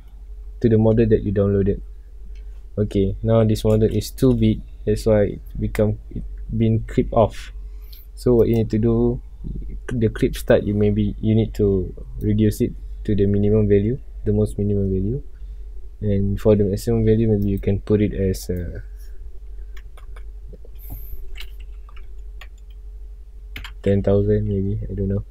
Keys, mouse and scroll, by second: 0.0-0.5 middle drag, 0.5 scroll up 1, 0.9-4.3 middle drag, 4.3 n, 5.4 scroll down 1, 5.8 scroll up 1, 6.6 scroll down 1, 6.8-7.2 middle drag, 7.2 scroll up 1, 8.3 click, 10.4-13.6 drag, 13.6-15.0 middle drag, 15.0 scroll up 1, 15.5 scroll down 1, 15.7 middle click, 15.8 scroll up 1, 16.3-17.4 middle drag, 17.4-20.0 drag, 20.0 KP_0, 23.7 Return, 24.6 scroll down 1, 24.7-25.3 middle drag.